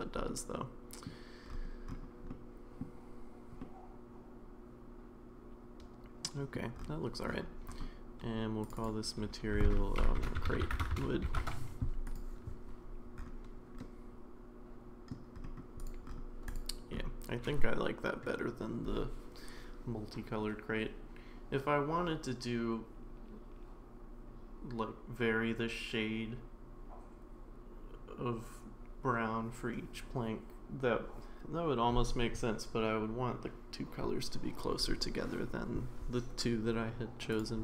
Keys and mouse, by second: 0.3-1.1 middle drag, 2.3-2.8 middle drag, 3.6-6.6 middle drag, 8.7-11.8 drag, 12.0 click, 13.8-15.1 middle drag.